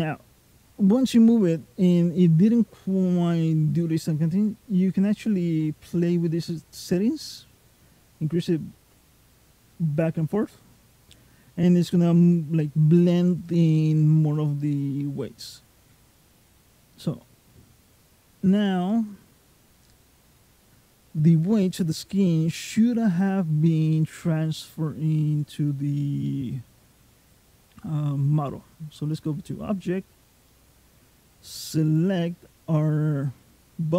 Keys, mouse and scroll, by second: 17.8 click, 18.7 middle click, 20.2 middle click, 25.2 click, 30.3 middle click, 31.7 click.